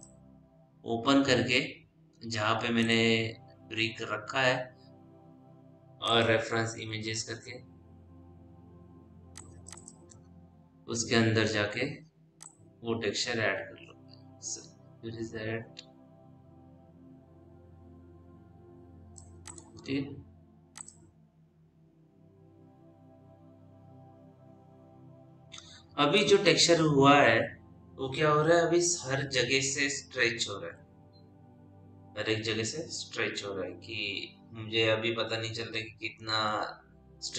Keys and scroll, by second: 7.0-7.7 typing.